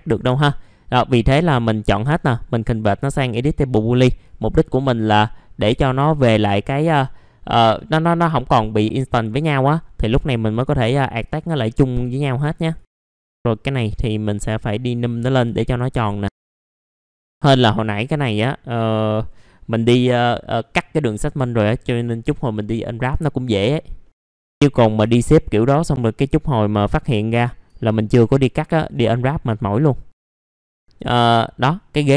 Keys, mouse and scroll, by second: 0.4 ctrl+click, 2.1 right click, 3.5 click, 5.7 F4, 9.6 right click, 10.5 click, 10.8 F4, 11.2 click, 12.9 right click, 13.0 F4, 13.1 click, 13.3 F4, 13.8-14.9 drag, 15.7 middle click, 16.2 click, 16.3 F4, 16.4 click, 16.5 middle click, 16.6 F4, 16.8 click, 16.9 scroll up 1, 17.1 scroll down 1, 17.3 click, 23.6-24.4 scroll down 3, 24.0 middle click, 24.3 middle click, 25.1 alt+middle click, 26.8 scroll down 1, 27.2 alt+middle click, 27.7-28.5 scroll up 1, 28.6 alt+middle click, 30.1 scroll down 1, 30.5 alt+middle click, 30.7 scroll down 1, 30.8 middle click, 31.2 alt+middle click, 32.0-32.1 scroll up 1.